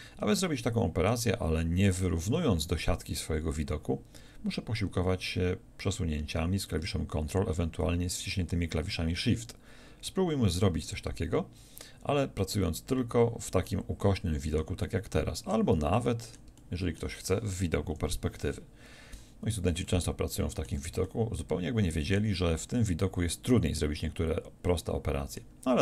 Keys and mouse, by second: 17.9 KP_5.